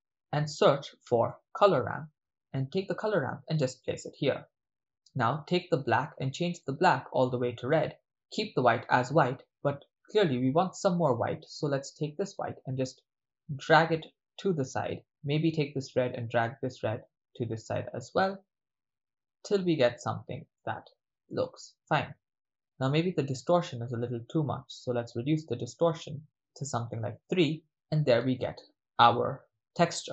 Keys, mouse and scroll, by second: 5.7 click, 12.4-15.4 drag, 16.0-18.0 drag, 18.3-20.3 drag, 20.6 middle click, 21.4-22.9 middle drag, 24.3-27.1 drag, 27.2 click, 28.5 ctrl+middle drag.